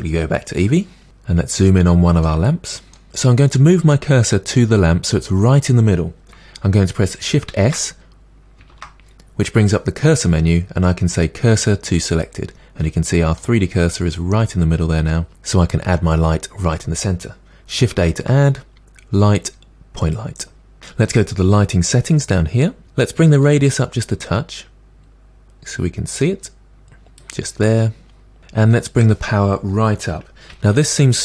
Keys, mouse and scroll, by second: 0.3-1.3 drag, 1.3 scroll up 4, 1.9 shift+middle click, 2.9 scroll up 1, 3.1-12.2 middle drag, 13.4-15.3 middle drag, 20.1 shift+a, 25.3-26.5 drag.